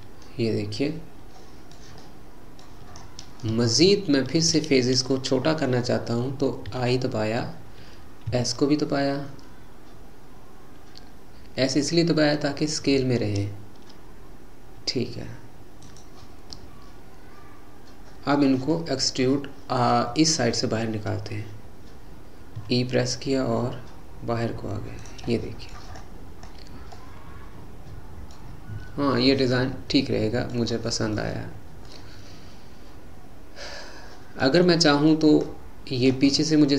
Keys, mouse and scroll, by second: 2.9-3.7 scroll up 4, 3.7-6.7 shift+middle drag, 16.6-19.8 middle drag, 19.8-20.5 scroll down 2, 20.5-21.1 scroll down 2, 22.6 e, 25.4 middle click, 26.0-26.6 scroll up 6, 27.0-28.8 middle drag, 28.8-29.4 scroll down 1, 29.4-31.5 middle drag, 31.5-31.9 scroll down 2, 31.9-35.4 middle drag, 35.4-36.1 scroll up 3, 36.1 scroll up 2, 36.4-36.7 middle drag.